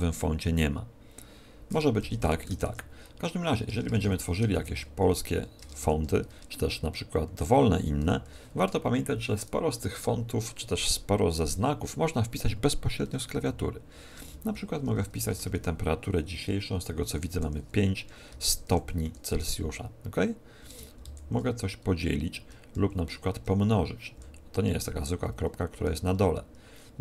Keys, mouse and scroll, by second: 1.7 r, 2.6 Tab, 3.7-5.8 typing, 7.9 shift+b, 13.3-15.3 typing, 17.4 5, 18.7 shift+0, 19.0 shift+c, 20.6 space, 20.9 shift+., 22.3 space, 22.7 ., 23.3 space, 24.1 ., 25.3 space, 25.8 BackSpace, 26.0 BackSpace.